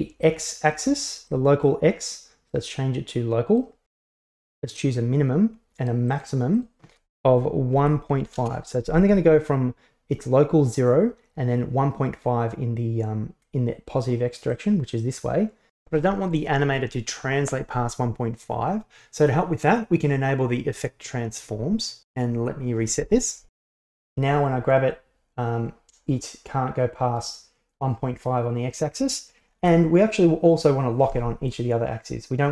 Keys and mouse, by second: 1.4-1.7 middle drag, 2.7-3.6 drag, 4.9 click, 6.2 click, 6.7-9.0 drag, 14.6-16.1 drag, 19.2 click, 20.4-21.6 drag, 24.0 g, 29.7 alt+g.